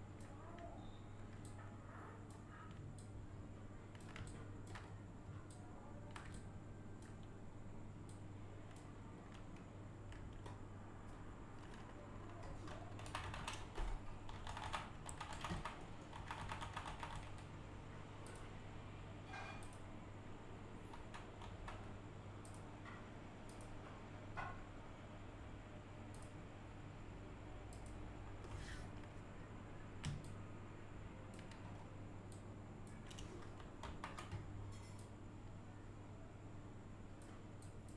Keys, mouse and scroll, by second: 3.2-4.3 drag, 4.3 click, 4.8-5.3 scroll up 1, 5.5-9.2 shift+drag, 9.2-9.9 scroll down 1, 10.2-11.6 scroll down 1, 14.1-14.5 scroll up 1, 15.8 middle click, 18.3 click, 19.6 click, 22.5 click, 26.2 click, 27.7 click, 30.1 click, 30.3-31.7 drag, 31.7-32.3 scroll up 1, 32.3-35.0 drag, 35.0-37.6 drag.